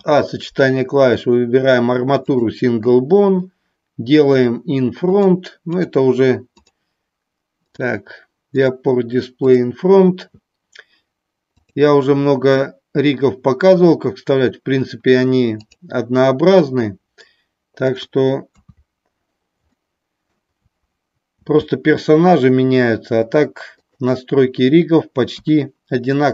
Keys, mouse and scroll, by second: 5.2 click, 5.7 click, 7.7 click, 8.4 click, 9.4 click, 11.5-15.8 drag, 18.4 KP_3, 25.3 KP_1.